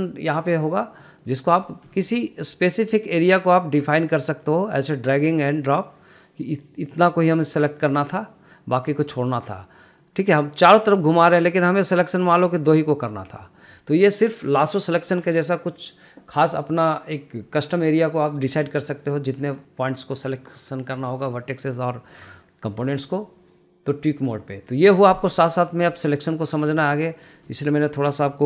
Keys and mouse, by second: 1.4 middle click, 1.9 click, 2.5 middle click, 4.1-7.4 drag, 10.5-13.2 drag, 17.6-24.5 drag, 26.0 middle click, 26.5 shift+middle click, 27.3 shift+middle click.